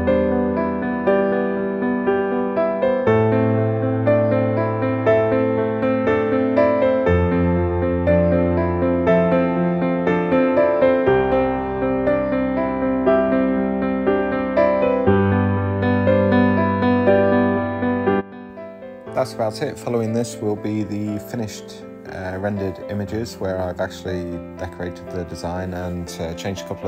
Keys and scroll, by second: 0.1 d, 0.4 s, 0.5 d, 6.4 shift+1, 6.6 Return, 8.1-9.2 typing, 10.4-11.7 typing.